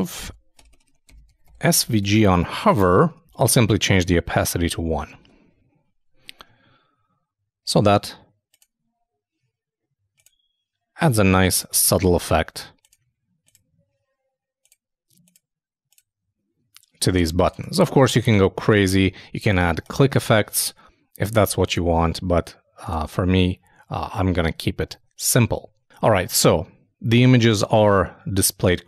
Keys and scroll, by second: 1.4-2.5 typing, 4.5 super+i, 4.6 super+s, 5.2 super+Tab.